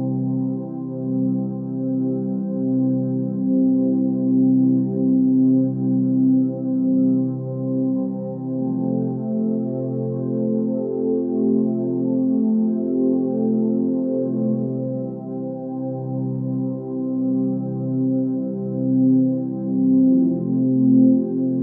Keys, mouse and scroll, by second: 4.8 ctrl+space, 6.1 ctrl+z, 6.8 ctrl+space, 19.5 ctrl+z.